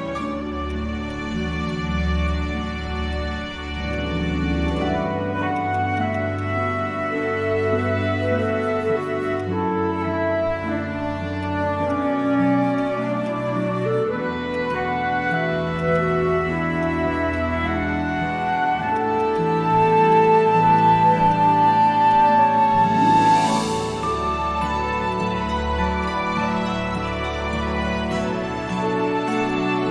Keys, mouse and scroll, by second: 6.1 double click, 14.6 right click, 18.6 ctrl+z, 19.2 right click, 24.3 right click.